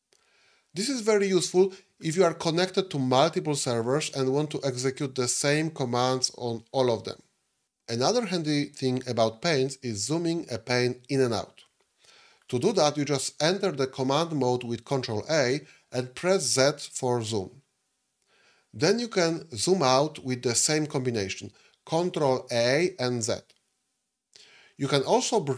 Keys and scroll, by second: 15.2 ctrl+a, 16.5 z, 21.8 ctrl+a, 23.0 z.